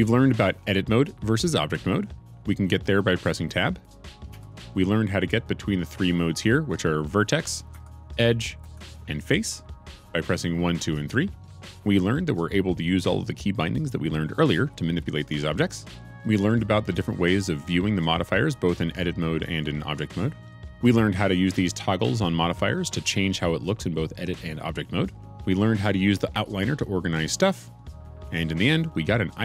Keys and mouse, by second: 3.8 click, 4.2 Tab, 7.7 2, 8.6 3.